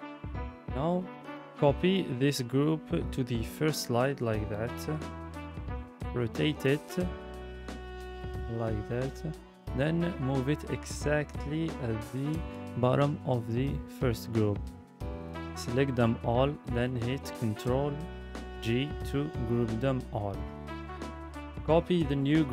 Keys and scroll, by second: 0.9 ctrl+c, 3.2 ctrl+v, 14.6 ctrl+g, 18.9 ctrl+c, 22.0 ctrl+c.